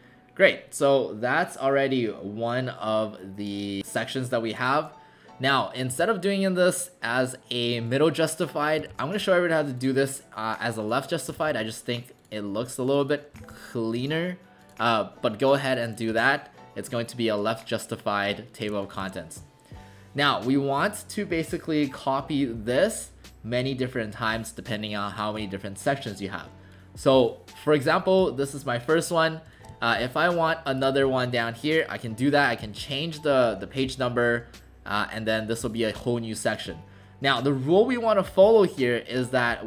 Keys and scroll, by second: 5.9 w, 8.9 ctrl+a, 11.4 ctrl+a, 13.4 ctrl+a, 16.1 w, 19.0 shift+w, 33.3 1.